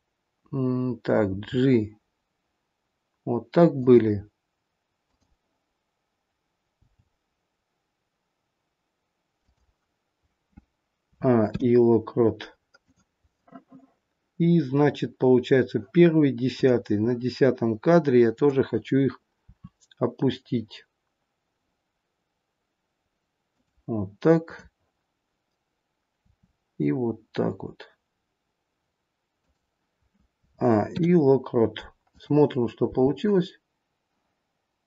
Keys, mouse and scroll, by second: 1.3 g, 5.0 click, 6.8 g, 11.0 a, 11.3 i, 16.6 click, 18.2 click, 19.5 r, 24.4 click, 26.2 r, 30.3 a, 30.8 i, 32.8 space.